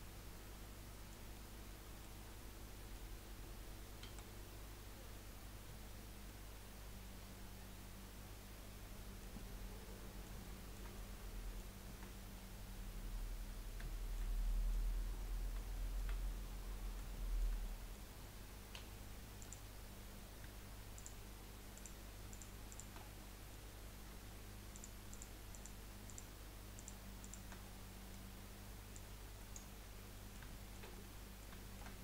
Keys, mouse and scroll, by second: 1.3 middle click, 2.2-2.7 scroll up 2, 2.7 middle click, 2.9 scroll down 1, 4.0 KP_1, 6.4-9.3 middle drag, 9.4-11.9 middle drag, 11.9-13.9 shift+scroll up 3, 13.9-14.9 shift+middle drag, 14.9-15.7 scroll up 1, 15.7-18.7 shift+middle drag, 18.7 3, 19.4 click, 20.0 scroll up 3, 20.9 shift+click, 21.7 shift+click, 22.3 shift+click, 22.7 shift+click, 23.0 scroll down 4, 23.3 middle click, 23.8-24.2 scroll up 2, 24.7 shift+click, 25.1 shift+click, 25.5 shift+click, 26.1 shift+click, 26.8 shift+click, 27.2 shift+click, 27.6-28.9 middle drag, 28.9 click, 30.0-31.9 middle drag, 31.9 scroll up 1.